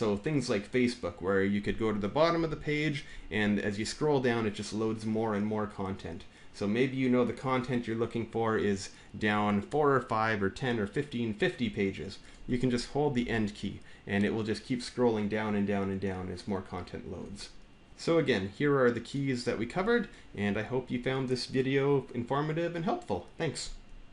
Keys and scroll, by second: 2.1 End, 13.0-16.9 End, 17.7 End.